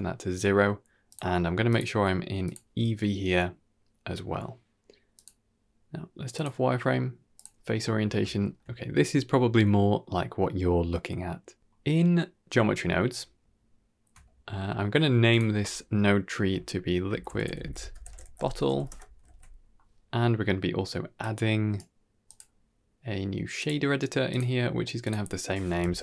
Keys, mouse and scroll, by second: 1.0 click, 1.6-2.5 drag, 5.0-7.5 drag, 8.2 shift+middle click, 11.2-11.6 scroll up 3, 11.6-12.1 middle drag, 12.8 middle click, 13.3 ctrl+middle click, 14.2 middle click, 15.2-18.8 drag, 18.4 t, 19.3 ctrl+s, 21.1 click, 22.1-23.6 drag, 24.2 click, 24.9-26.0 drag.